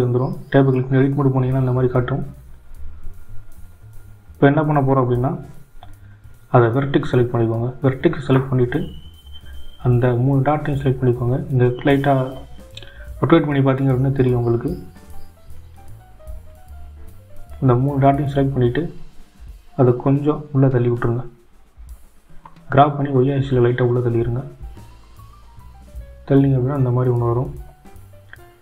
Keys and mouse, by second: 2.6 shift+click, 4.6-6.3 drag, 8.0 g, 13.5-16.6 drag, 21.7-24.2 drag.